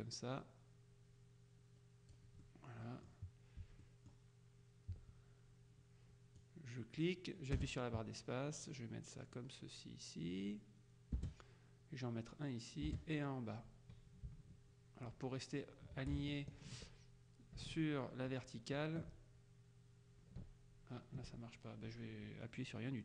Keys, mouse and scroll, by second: 2.5 middle click, 3.9 middle click, 6.5-23.0 drag, 7.6 space, 11.3 space, 12.9 space.